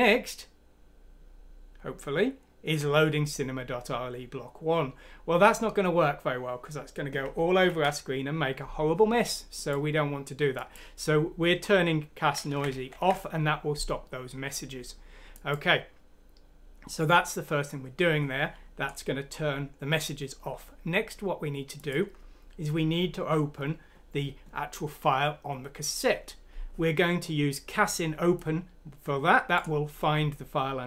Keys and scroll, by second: 7.6 ctrl+F9, 12.5 ctrl+z.